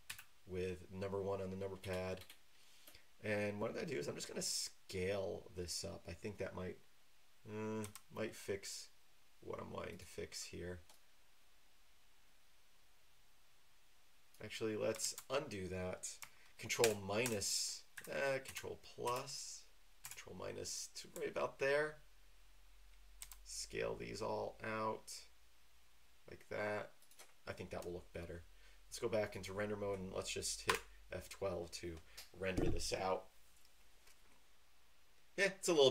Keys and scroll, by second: 0.0 KP_1, 7.8 s, 15.0 ctrl+z, 16.8 ctrl+KP_Subtract, 17.2 ctrl+KP_Subtract, 20.0 ctrl+KP_Add, 23.2 s, 30.7 F12.